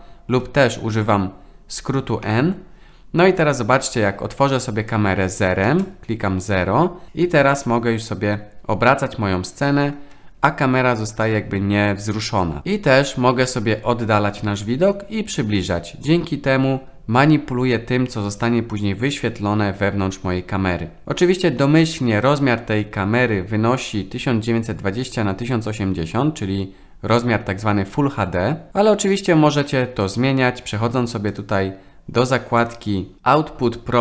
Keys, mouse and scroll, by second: 0.4 n, 2.3 n, 5.7 KP_0, 7.1-10.0 middle drag, 31.3 click, 32.6 click.